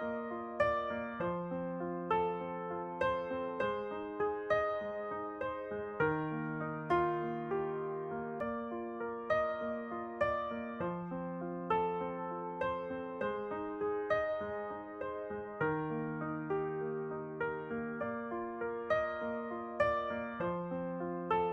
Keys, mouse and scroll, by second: 0.0-1.4 right drag, 0.8 shift+h, 1.5-3.4 middle drag, 3.5 middle click, 6.1 alt+h, 7.7 middle click, 7.7-10.1 right drag, 9.4 Tab, 9.5-14.3 middle drag, 10.3 a, 13.8-20.0 typing, 15.2-19.0 middle drag, 19.4 middle click.